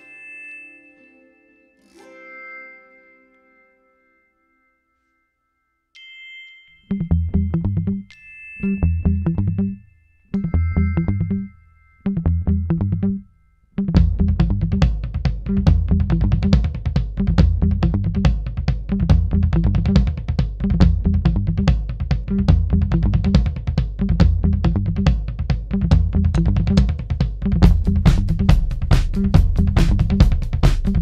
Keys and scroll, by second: 1.3 4, 3.2 F1, 3.4 F2, 7.2 4, 26.7 0, 27.0 Return, 27.2 0, 27.4 Return.